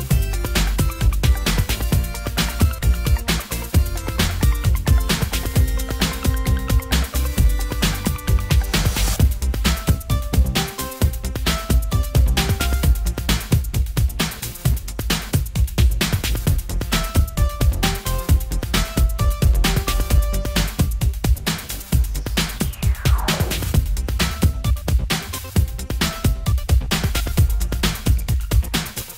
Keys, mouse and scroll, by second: 0.8 shift+z, 18.5 shift+z, 23.8 shift+z.